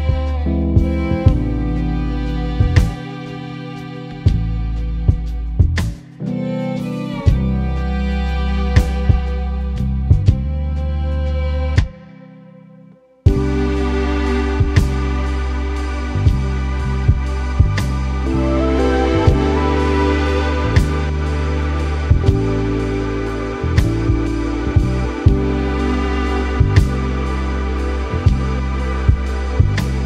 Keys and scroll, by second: 6.3 Return, 6.5 super+0, 6.8 super+=, 7.9 super+-, 8.5 super+t, 10.2 Return, 10.9 super+-, 11.3 super+t, 13.0 Return, 13.5 super+=, 14.0 super+t, 17.0 Return, 19.9 super+-, 20.5 super+t, 20.8 Right, 21.5 Down, 22.9 Return, 23.6 super+s, 25.7 super+=, 26.4 super+-.